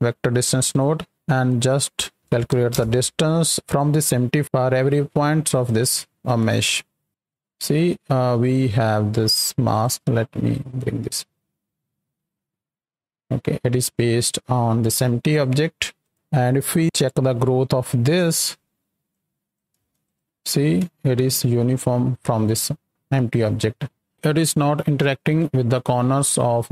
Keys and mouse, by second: 0.7 click, 3.6 click, 5.1 click, 6.6 ctrl+shift+click, 9.6 click, 10.5 right click, 15.9 click, 17.3 shift+d, 18.2 click, 19.1-19.5 drag, 20.0 ctrl+shift+click, 21.3-24.1 shift+drag, 24.6-26.7 shift+drag.